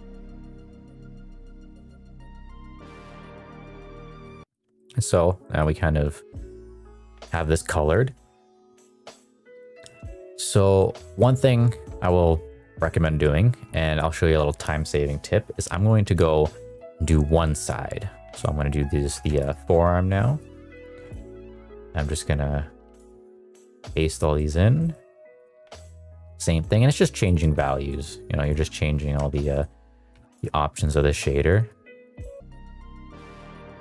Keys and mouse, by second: 0.2 click, 0.6 middle click, 0.7 shift+middle click, 0.8 middle click, 1.0 click, 1.2 middle click, 1.3 middle click, 1.5 middle click, 1.5 middle click, 2.0 ctrl+c, 2.4 middle click, 2.5 middle click, 2.6 middle click, 2.8 ctrl+v, 2.9 ctrl+v, 3.1 ctrl+v, 3.4 click, 3.8 middle click, 4.7 middle click, 5.3 middle drag, 6.1 middle drag, 6.9 middle drag, 9.5 shift+middle click, 9.7 shift+middle drag, 10.3 shift+middle drag, 10.7 middle click, 11.0 shift+middle drag, 11.9 shift+middle click, 12.5 shift+middle drag, 16.6 click, 19.2 a, 19.3 KP_Decimal, 20.2 middle drag, 20.7 middle click, 22.1 ctrl+v, 22.8 ctrl+v, 23.3 ctrl+v, 23.7 middle click, 23.9 shift+middle drag, 24.3 middle click, 24.8 middle click, 25.4 click, 26.9 shift+middle click, 27.2 shift+middle click, 27.8 middle click, 28.3 click, 29.4 click, 32.0 click, 32.5 middle click, 32.6 middle click, 32.7 middle click, 32.8 ctrl+v, 33.0 ctrl+v, 33.3 click, 33.4 middle click, 33.5 click.